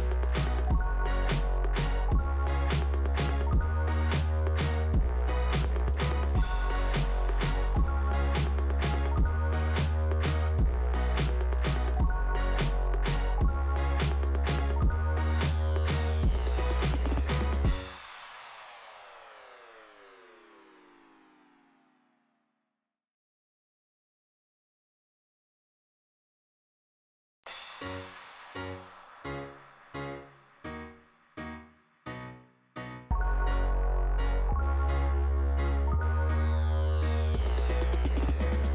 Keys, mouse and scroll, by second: 3.9-4.5 scroll up 1, 4.9 click, 6.1-7.3 scroll down 1, 7.7 click, 12.1-12.8 scroll down 1, 17.2-17.6 scroll down 1, 17.8-18.4 scroll down 1, 18.7 middle click, 19.9 click, 20.0 click, 23.1 click, 23.2 click, 23.7 scroll up 2, 23.9-24.3 scroll down 1, 33.5 scroll up 2, 36.8-37.5 scroll down 1, 37.5 middle click.